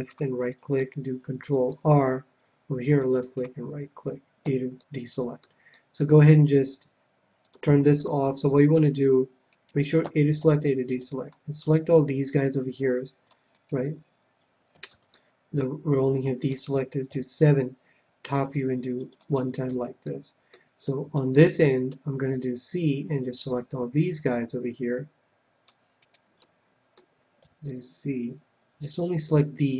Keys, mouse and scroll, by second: 0.0-1.7 right drag, 0.5-2.4 middle drag, 1.5 ctrl+r, 3.2-4.9 right drag, 4.4 a, 4.7-7.4 middle drag, 7.4-9.2 drag, 8.5 c, 9.5-11.5 right drag, 10.0 a, 10.4 a, 10.9 c, 13.4-15.3 right drag, 14.9 ctrl+z, 15.1-17.0 middle drag, 17.0 KP_7, 17.4-19.6 middle drag, 18.5-20.3 drag, 19.7 a, 20.1-23.2 middle drag, 22.3 c, 26.0-27.8 right drag, 26.3-28.3 middle drag, 27.4 c.